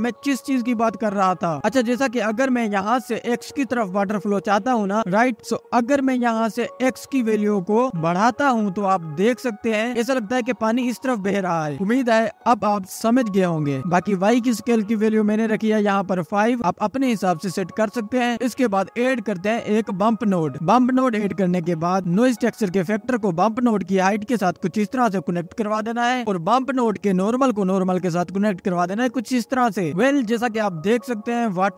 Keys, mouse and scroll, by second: 3.8-5.6 scroll down 2, 5.6-10.4 drag, 12.4-13.4 drag, 13.4 KP_Decimal, 14.7 middle click, 15.3-17.7 drag, 19.1 ctrl+s, 19.6 shift+a, 21.5-22.0 scroll up 4, 22.1-24.2 drag, 24.6-25.6 drag, 27.9-28.6 scroll up 1, 28.6 click.